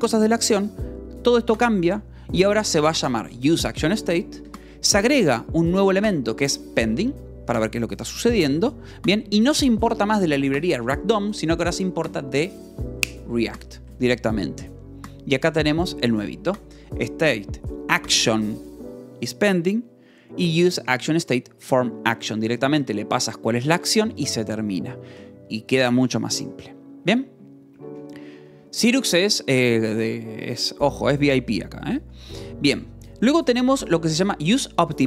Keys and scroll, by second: 2.0-4.5 typing, 4.4 Escape, 5.5 shift+v, 8.4 Escape, 8.8 j, 9.6 shift+v, 14.3 Escape, 14.9 j, 23.4 f, 24.1 v, 24.7 e, 25.1 Escape, 27.3 k, 28.0 j, 31.7 k, 32.8 shift+v.